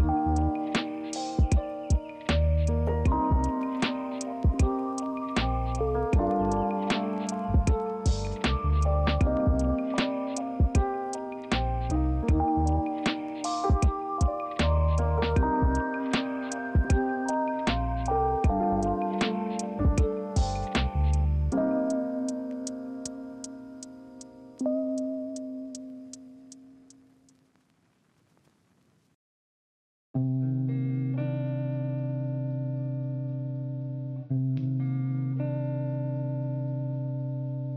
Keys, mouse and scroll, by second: 8.5 ctrl+z, 29.9 ctrl+c, 30.3 ctrl+f, 31.4 ctrl+z.